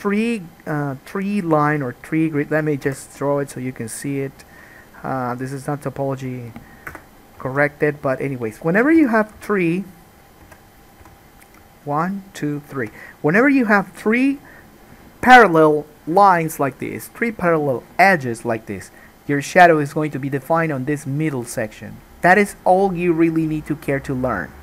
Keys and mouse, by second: 3.0 k, 7.6 alt+a, 9.1 2, 9.5 3, 9.6 click, 9.9-11.0 middle drag, 10.6 2, 11.0 click, 11.1-12.1 middle drag, 11.1 2, 12.1 shift+click, 12.2 shift+middle click, 12.7 shift+click, 12.8-24.6 shift+middle drag.